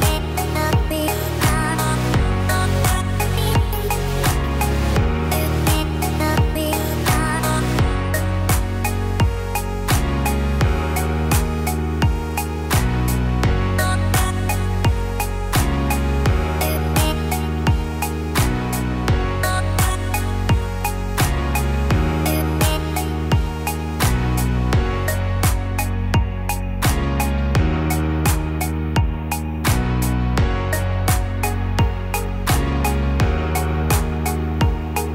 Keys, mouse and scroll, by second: 0.1 click, 0.7 right click, 2.1 click, 2.7 middle click, 3.7-4.4 scroll down 2, 4.4 middle click, 4.4 scroll down 1, 5.4 scroll up 4, 5.9 middle click, 7.7 scroll up 1, 8.7-9.0 scroll up 1, 9.2 click, 9.9 Tab, 10.7 click, 10.9 click, 15.2 shift+click, 17.3 ctrl+b, 20.7 Tab, 22.7 ctrl+z, 23.9 ctrl+z, 24.7-25.1 scroll up 2, 25.1 middle click, 26.4 ctrl+b, 29.3 Tab, 30.6-31.4 scroll down 4, 31.1 Tab, 31.4 click, 31.9 Tab, 32.2 click, 32.6 scroll down 2, 32.9 middle click, 33.5 scroll down 1, 33.9 middle click, 34.4-34.9 scroll up 3, 34.7 middle click.